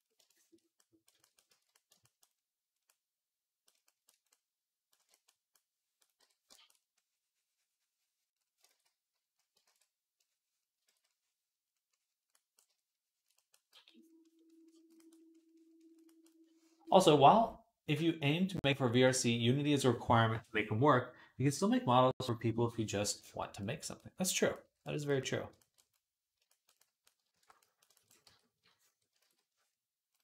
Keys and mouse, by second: 0.7 shift+click, 1.3 ctrl+z, 1.8 ctrl+click, 2.1 click, 2.1 middle click, 2.1 right click, 2.8 click, 2.8 middle click, 2.8 right click, 2.9-4.6 drag, 2.9-4.6 middle drag, 2.9-4.6 right drag, 8.5 ctrl+z, 9.5 alt+q, 10.7 ctrl+z, 13.2-24.4 middle drag, 13.6 v, 24.4-26.4 shift+drag, 26.7-30.2 drag, 26.7-27.8 middle drag, 26.7-27.8 right drag, 27.2 alt+q, 28.1 d, 29.0 ctrl+z.